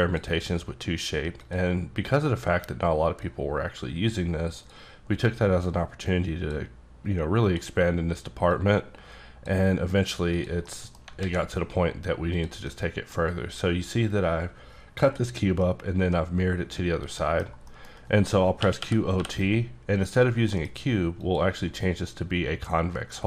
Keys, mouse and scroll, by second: 3.2 click, 4.5 click, 5.7 click, 7.4 click, 8.5 click, 10.3 click, 10.6 middle click, 11.2 alt+x, 12.3 click, 12.7 middle click, 15.6 middle click, 18.6 q, 18.8 o, 19.2 t, 20.5 F9, 21.2 click.